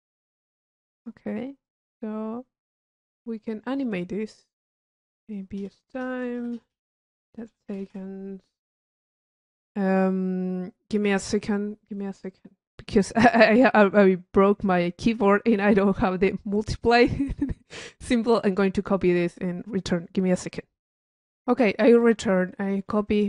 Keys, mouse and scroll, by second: 0.7-1.0 drag, 1.6 click, 2.9 click, 3.7 click, 4.2 click, 5.0 click, 22.2 click.